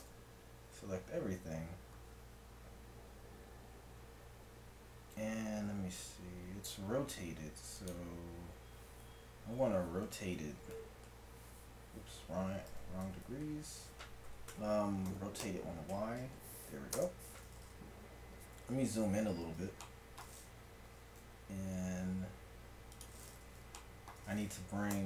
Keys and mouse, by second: 0.0 a, 0.7 g, 9.5 r, 12.7 r, 14.5 Escape, 15.1 r, 18.7 KP_Decimal, 20.9 g, 24.9 Tab.